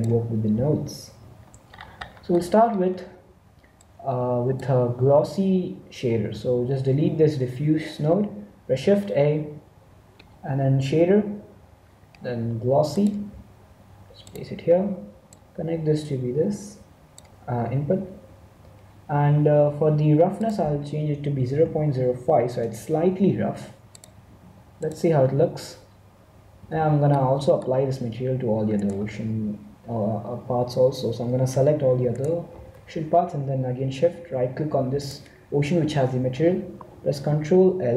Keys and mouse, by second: 0.0-1.0 drag, 1.1 n, 3.9-5.5 drag, 6.2 x, 8.7 shift+a, 15.3-17.2 drag, 20.4-22.1 drag, 23.9-25.7 drag, 26.5 z, 26.7 z, 27.3-28.7 middle drag, 28.7-30.5 right drag, 32.1-33.8 right drag, 34.9-36.7 right drag.